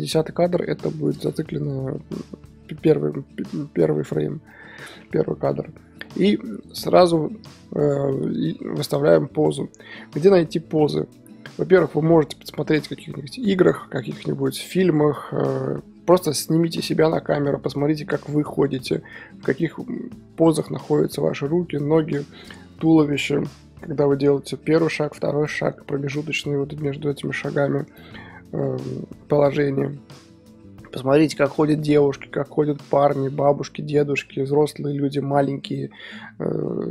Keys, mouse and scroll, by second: 1.1-1.8 scroll up 1, 1.8 scroll up 1, 2.1-2.6 scroll down 5, 4.5-5.4 middle drag, 5.4 KP_1, 6.1 scroll up 3, 9.4-36.9 drag, 9.4-10.4 scroll up 1, 10.4-10.8 scroll up 1, 10.8-36.9 middle drag.